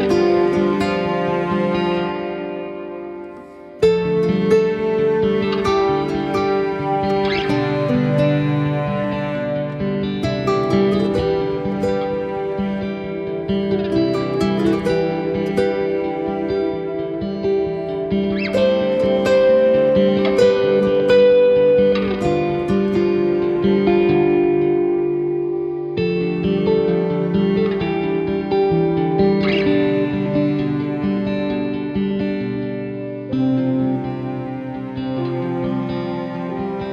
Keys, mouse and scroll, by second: 0.5-1.0 scroll up 5, 1.0 shift+middle click, 1.6 r, 2.8 g, 3.9 middle click, 4.2 scroll down 5, 4.4 middle click, 5.2 scroll down 2, 5.3 middle click, 5.6-6.5 scroll up 5, 5.8 shift+middle click, 6.2 middle click, 6.5 scroll down 2, 6.7 middle click, 7.1 ctrl+s, 7.6 shift+middle click, 7.8 scroll up 1, 8.2 middle click, 8.9 middle click, 9.3 middle click, 9.4-9.9 scroll down 4, 9.6 middle click, 9.9-10.4 scroll up 4, 10.2 middle click, 10.4-11.5 scroll down 3, 10.7 middle click, 11.1 middle click, 11.5-12.2 scroll up 3, 12.5 middle click, 12.8 shift+middle click, 13.2 click, 13.4 click, 13.7 click, 15.4 middle click, 18.6-18.9 scroll up 2, 19.0 shift+middle click, 19.6 scroll up 1, 19.7 middle click, 22.0 scroll down 4, 22.1 middle click, 25.4 shift+middle click, 26.0 middle click, 27.4 KP_1, 28.5-28.8 scroll up 3, 28.9 middle click, 29.2 shift+middle click, 29.4 scroll up 2, 29.6 click, 30.0 Tab, 30.5 click, 31.1 g, 32.8 click, 32.9 g, 34.0 middle click, 34.2 scroll up 2, 34.6 click, 35.1 g, 36.1 Tab, 36.4 click, 36.7 click.